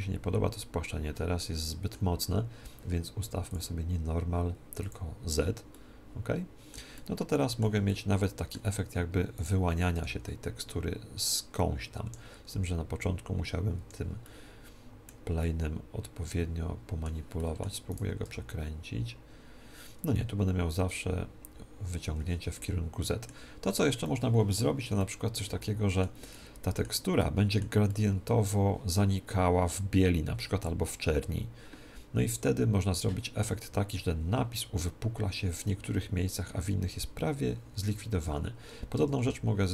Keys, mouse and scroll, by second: 3.4-5.4 drag, 5.6-9.3 middle drag, 9.3-11.1 right drag, 9.9 r, 11.3 r, 12.5 g, 14.2-17.1 middle drag, 17.3-19.1 middle drag, 17.8 click, 17.8-19.6 right drag, 18.1 r, 19.9 r, 22.5-29.5 middle drag, 37.7 Tab, 38.1 Tab, 38.9 ctrl+Tab.